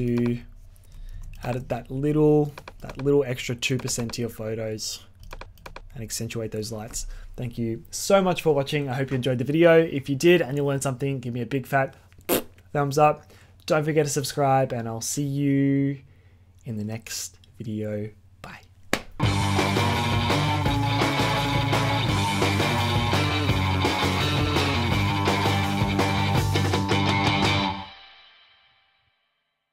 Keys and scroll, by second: 1.1 z.